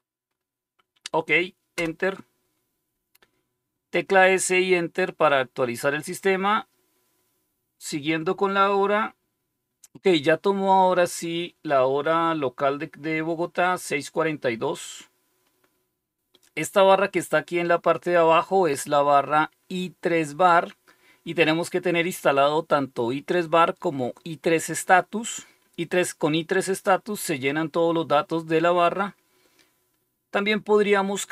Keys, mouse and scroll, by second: 1.7 Return.